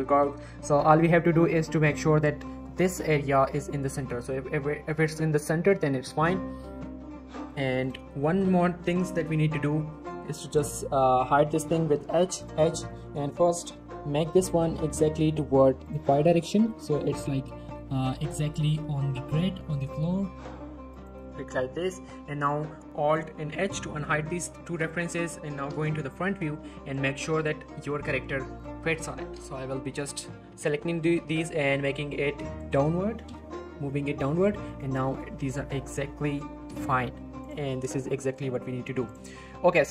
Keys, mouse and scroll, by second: 0.4 shift+middle click, 0.7 scroll up 1, 1.3 shift+middle click, 1.5-2.0 shift+scroll up 2, 3.8 scroll up 1, 4.1-4.6 scroll down 1, 4.6 scroll up 1, 6.0 scroll down 1, 6.2-6.7 middle click, 6.8 scroll down 1, 6.9-7.6 middle click, 7.0 scroll up 1, 7.4 click, 7.8 x, 8.1 middle click, 8.4 ctrl+z, 9.6-10.1 scroll up 1, 10.1 scroll down 1, 10.3-10.8 middle click, 11.1 click, 12.1 h, 12.4 click, 12.5 h, 12.9 click, 14.1 scroll up 1, 14.3 shift+middle click, 14.6 typing, 15.8 click, 16.0-16.9 scroll up 3, 17.0 shift+middle click, 17.3 g, 17.6 z, 21.2 scroll down 1, 23.1 click, 23.6 alt+h, 24.1 scroll up 1, 24.8 click, 25.1 middle click, 26.1 scroll up 1, 26.9 click, 27.1 scroll up 1, 27.4 scroll down 1, 27.8 middle click, 28.2 scroll down 1, 28.6 shift+click, 29.7 scroll up 1, 30.4-30.7 typing, 32.6 click, 34.1 scroll down 1, 34.7 shift+middle click, 35.2-35.6 shift+scroll up 1, 35.6 scroll down 1, 35.7 middle click, 37.2 scroll up 1, 37.4 click, 38.1 scroll down 1, 38.2 middle click, 38.3-39.1 scroll up 1, 39.1 click.